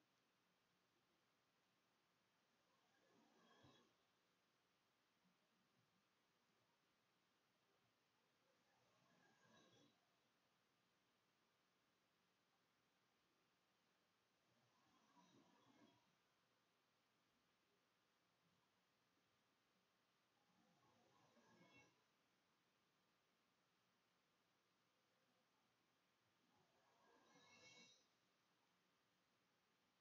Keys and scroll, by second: 0.6-6.6 typing, 6.8 Delete, 6.9 End, 7.9 Home, 8.0-20.8 typing, 20.7 Return, 20.9 Delete, 21.7 End, 22.4 Delete, 22.5-23.4 typing, 25.4-30.0 typing, 25.6 Delete, 25.7 End.